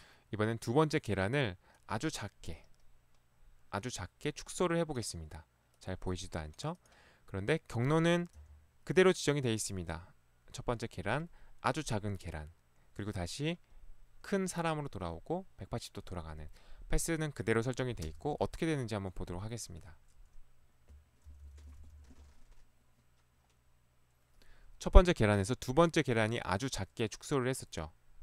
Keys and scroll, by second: 8.4 p, 18.1 space, 21.3 Left, 21.5 Left, 21.6 Left.